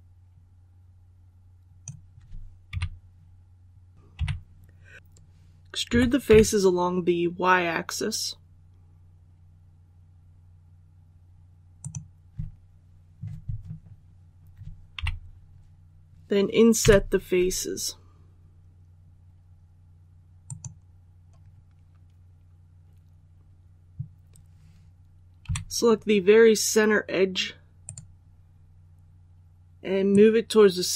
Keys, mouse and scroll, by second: 2.6 KP_1, 3.9 right click, 4.1 KP_3, 5.8-6.2 typing, 11.7 click, 14.8 KP_1, 16.7 i, 20.3 click, 25.3 2, 27.7 right click, 30.0-30.9 drag.